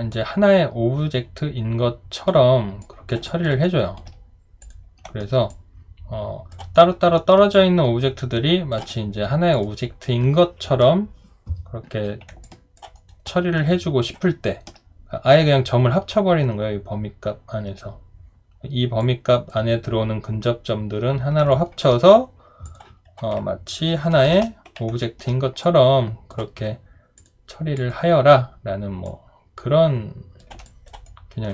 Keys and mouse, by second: 3.3 alt+click, 3.6 alt+right click, 5.2 alt+right click, 5.5 alt+click, 6.7 alt+right click, 7.2 alt+middle click, 7.5 alt+click, 12.4 alt+click, 12.9 alt+right click, 13.3 alt+middle click, 21.5 alt+right click, 24.8-25.5 typing, 25.0 alt+right click, 30.6 alt+click, 31.1 alt+right click.